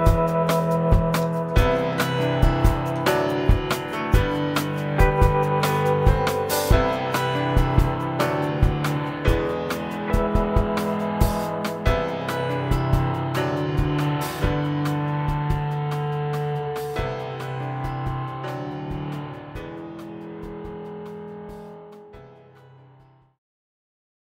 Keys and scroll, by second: 21.0 ctrl+0.